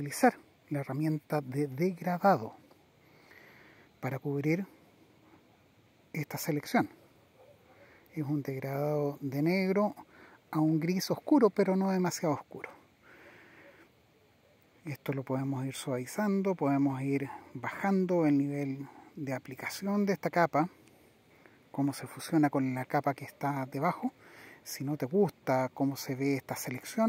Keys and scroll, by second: 16.2 Down.